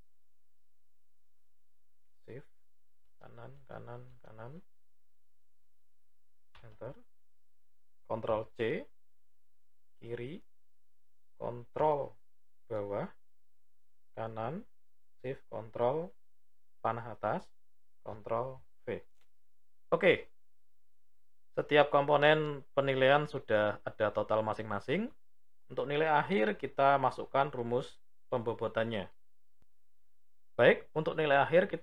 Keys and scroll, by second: 8.1 ctrl+c, 10.2 Left, 11.4 ctrl+Down, 14.2 Right, 17.8 ctrl+v.